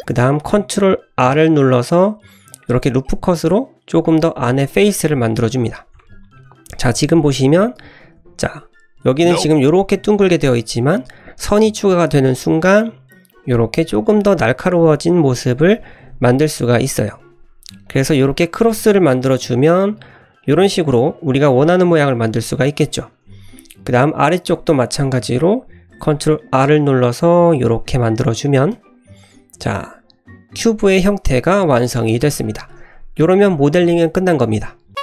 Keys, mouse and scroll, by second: 1.3 ctrl+r, 5.1 middle click, 5.5-6.0 scroll up 1, 6.0 shift+middle click, 6.4 middle click, 6.9 ctrl+z, 7.2 middle click, 8.2 ctrl+r, 16.0 ctrl+r, 19.4 Tab, 19.7 middle click, 20.0-20.6 scroll up 1, 21.6-21.9 middle drag, 21.9 scroll down 2, 22.3 Tab, 22.6 middle click, 23.0 Tab, 23.1-23.6 scroll up 2, 23.6 middle click, 24.5 Tab, 24.7 scroll down 1, 25.9 ctrl+r, 28.6 Tab, 28.9-29.6 middle drag, 29.8-30.8 scroll down 1, 30.8-31.6 middle drag, 32.2 scroll down 1, 32.5 shift+middle click, 32.7 scroll up 1.